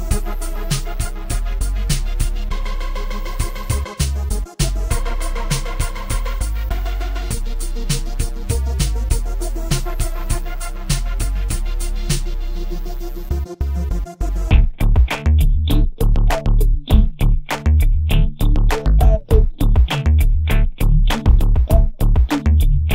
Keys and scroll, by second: 11.4 ctrl+f, 22.6 space.